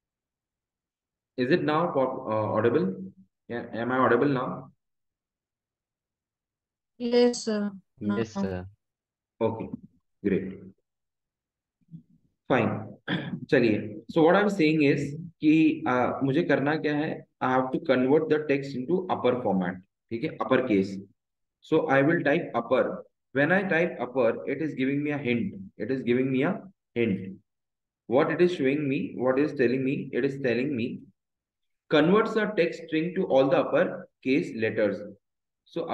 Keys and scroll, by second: 8.0 BackSpace, 13.5 Return, 19.4 Left, 25.4 BackSpace, 26.0 BackSpace.